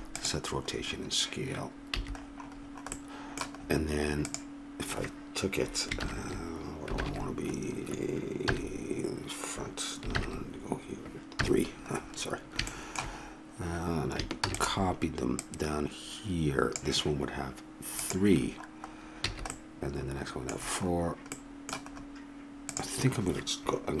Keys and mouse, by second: 2.0 a, 4.3 right click, 8.5 KP_1, 11.4 KP_3, 14.4 shift+d, 15.5-17.7 drag, 18.4 click, 19.3 a, 20.0-22.0 middle drag, 22.8-24.0 right drag.